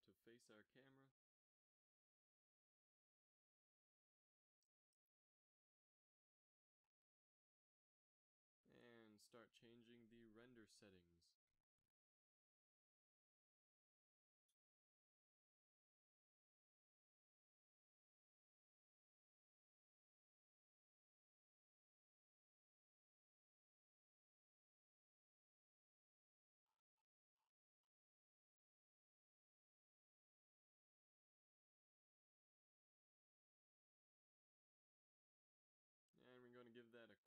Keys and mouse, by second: 2.2 click, 19.6 ctrl+s, 21.9 click, 32.8 F12, 34.7-36.6 drag, 36.6 F12.